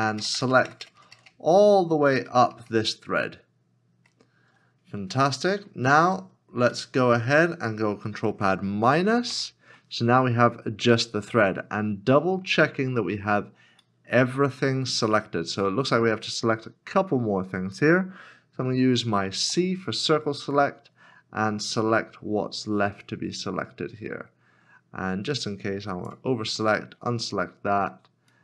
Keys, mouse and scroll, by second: 0.0 ctrl+KP_Add, 0.2 ctrl+KP_Add, 0.4 ctrl+], 0.6 ctrl+], 1.0 ctrl+], 1.1 ctrl+], 1.3 ctrl+], 1.8 ctrl+], 2.1 ctrl+], 2.4 ctrl+], 2.5 ctrl+], 2.7 ctrl+], 2.9 ctrl+], 3.4 ctrl+], 5.0-5.6 scroll down 2, 5.6-6.7 scroll up 1, 6.7 middle click, 9.3 ctrl+[, 10.3 scroll up 1, 11.3 middle click, 13.3 scroll up 1, 14.1 shift+middle click, 16.7 middle click, 26.6 middle click.